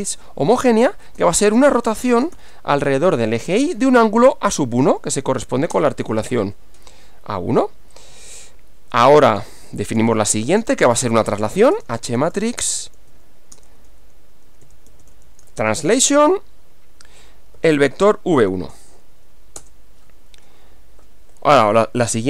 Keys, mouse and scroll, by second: 0.0-2.4 typing, 4.1 a, 4.5 1, 5.3 shift+9, 5.7 Return, 8.0 click, 9.6-16.2 typing, 17.6 v, 17.9 1, 18.8 shift+9, 19.6 Return, 21.8 Up.